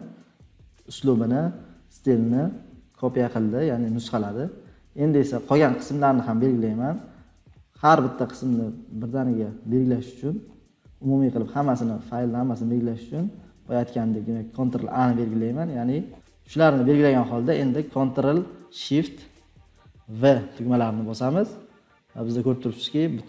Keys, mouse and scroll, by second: 4.3 scroll up 1, 4.3 middle click, 4.3 scroll down 1, 4.5 scroll up 1, 4.6 scroll down 1, 5.8-6.2 scroll down 6, 6.4-7.5 scroll, 8.1-8.5 scroll, 8.8-14.1 scroll, 14.5 ctrl+a, 15.4 scroll, 15.4-16.3 scroll down 49, 16.5 scroll, 22.1-23.1 scroll up 20, 23.1-23.2 scroll.